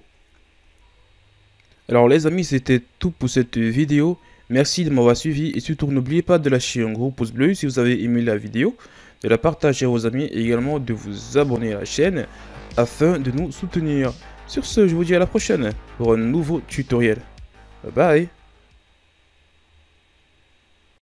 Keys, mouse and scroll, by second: 0.2 shift+scroll up 2, 0.7 Tab, 7.3 KP_3, 10.4 KP_1.